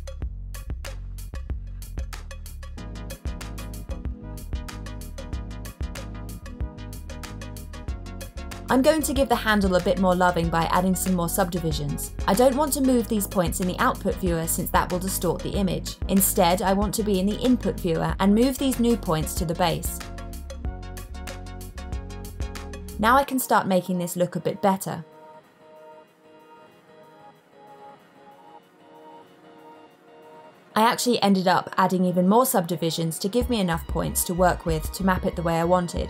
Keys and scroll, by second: 8.2 super+a, 15.9 super+z.